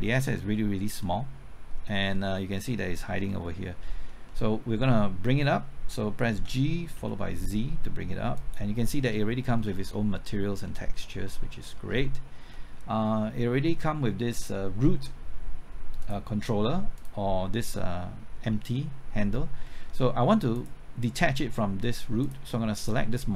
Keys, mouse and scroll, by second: 1.3 middle click, 2.5-3.1 scroll up 1, 3.1 typing, 3.3 shift+middle click, 3.9-4.3 scroll up 1, 4.3 middle click, 6.3 typing, 8.3 typing, 9.0 scroll up 1, 9.3 shift+middle click, 9.8 scroll up 1, 10.6 scroll down 1, 11.2 middle click, 11.6 scroll up 1, 12.0 shift+middle click, 12.7 scroll up 1, 16.0 click, 17.7 middle click, 18.5 scroll down 1, 18.7 middle click, 20.5 click.